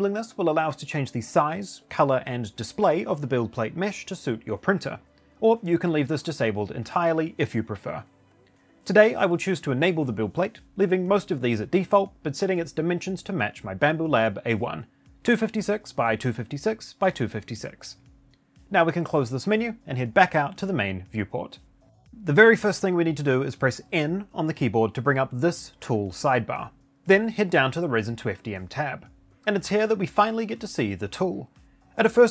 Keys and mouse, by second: 24.0 n.